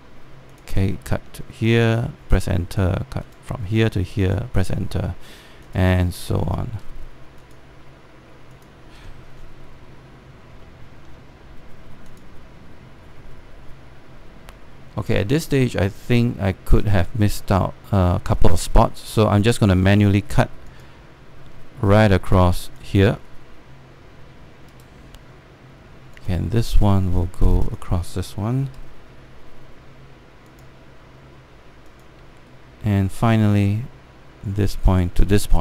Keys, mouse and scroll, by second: 0.2 Return, 1.2 click, 2.9 Return, 3.9 click, 5.3 Return, 6.3 click, 7.4 Return, 8.1 click, 9.5 Return, 9.9-11.2 scroll down 1, 11.6 alt+middle click, 12.8 click, 15.7-17.8 scroll up 1, 21.4 click, 25.4 Return, 26.8-29.4 drag, 29.4 Return, 31.2 click, 32.9 Return, 34.2 click.